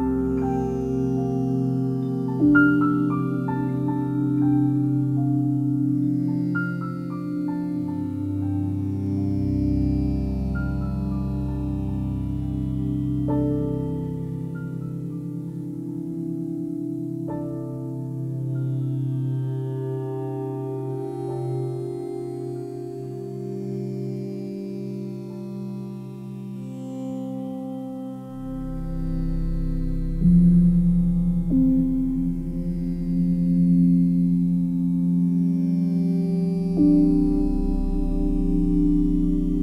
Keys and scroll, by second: 12.0 f.